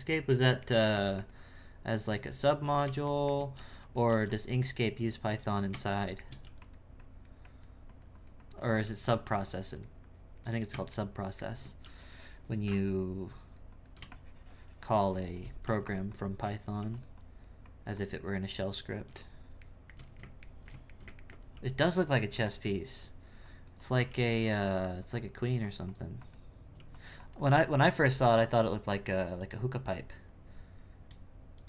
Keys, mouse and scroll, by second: 0.7 shift+middle click, 1.0 e, 1.6-3.2 drag, 3.2 shift+middle click, 3.5 f, 4.1 f, 4.6-6.0 drag, 6.0 shift+middle click, 6.4 e, 7.0-8.8 drag, 9.3-10.9 drag, 10.9 shift+middle click, 11.8 f, 13.3-15.6 drag, 15.6 f, 16.1 click, 16.8 f, 17.2-19.7 drag, 19.7-21.5 shift+middle drag, 21.5 f, 22.3 f, 23.0-24.1 drag, 24.6-26.7 drag, 27.2-30.4 drag.